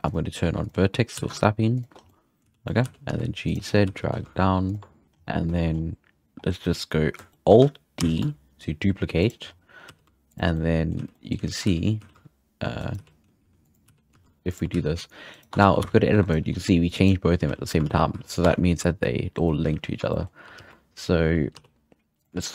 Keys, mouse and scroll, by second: 0.0-1.1 drag, 1.1 g, 2.0 scroll down 2, 2.0-2.5 middle drag, 2.4 z, 2.6 middle click, 2.8 g, 3.6 scroll up 1, 3.8 g, 4.8 scroll down 2, 5.2 scroll up 7, 5.5 scroll down 1, 5.5 shift+middle click, 5.7-6.1 scroll up 2, 6.2-6.7 scroll down 4, 7.3 shift+middle click, 8.0 alt+d, 9.4-9.8 scroll up 5, 9.8 g, 10.5-11.0 middle drag, 11.0 z, 11.1-11.4 middle drag, 11.4 z, 11.6 g, 13.0 g, 13.8 g, 14.7 z, 14.8-15.2 scroll down 2, 15.3 right click, 15.5 Tab, 15.8 a, 16.1 1, 16.2 right click, 16.4 g, 17.4 z, 17.8 alt+a, 17.9 scroll down 4, 18.1 z, 18.4 Tab, 20.1-20.6 shift+middle drag, 20.6 alt+d, 22.4 shift+middle drag.